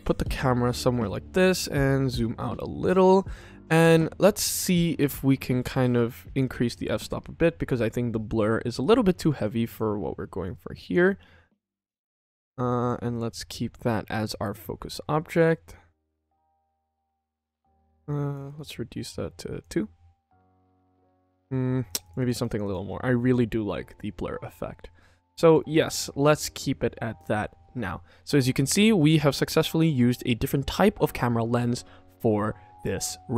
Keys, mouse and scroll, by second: 1.4-2.7 drag, 3.1 q, 3.7 ctrl+s, 5.5 click, 8.6 click, 9.3 click, 10.3 click, 11.5 click, 12.7 click, 14.8-16.4 drag, 18.0 click, 18.3-19.6 drag, 21.8 click, 21.9 click, 22.1 click, 22.2 click, 22.4 click, 22.5 click, 25.3 click, 25.6 ctrl+s, 29.2 click.